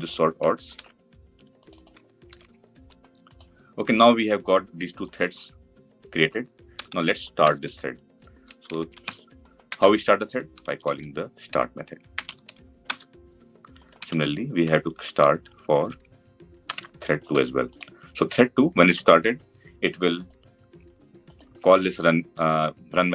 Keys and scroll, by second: 0.6 ctrl+c, 2.1 ctrl+v, 9.5 Return, 13.8 ctrl+d, 21.3 ctrl+b.